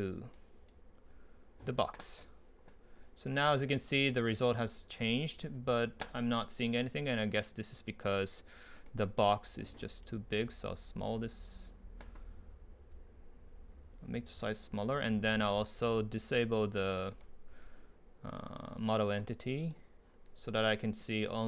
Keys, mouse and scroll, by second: 0.3-2.6 right drag, 3.1-4.5 drag, 4.5-6.1 right drag, 6.1-8.4 drag, 8.7-10.0 drag, 10.0 right click, 10.8 scroll down 2, 10.9 right click, 17.1 click, 17.2 middle click, 17.9-19.7 drag, 19.7 right click, 20.3 click, 20.9-21.2 drag, 21.2 right click.